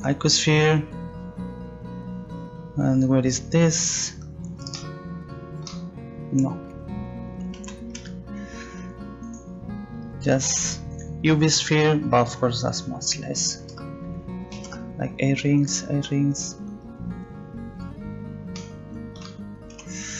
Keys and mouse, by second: 7.6 ctrl+z, 12.6-14.7 drag.